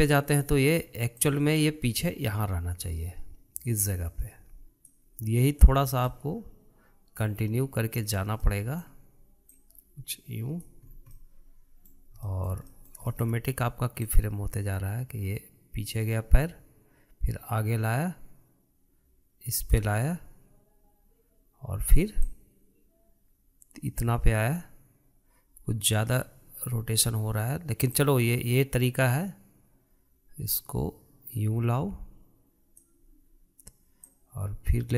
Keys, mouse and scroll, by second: 2.1 click, 7.0-10.4 middle drag, 10.4 click, 11.8 scroll down 2, 12.1-15.1 middle drag, 15.1 click, 23.3 click, 28.9 click.